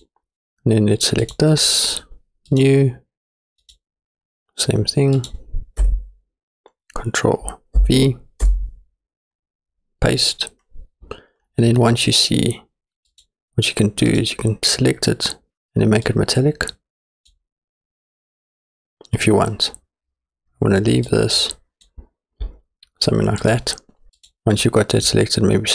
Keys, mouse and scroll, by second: 1.3 click, 2.5 click, 2.9 middle drag, 3.6 click, 8.7 middle click, 13.1 click, 14.1 click, 16.1-17.3 drag, 21.1 click.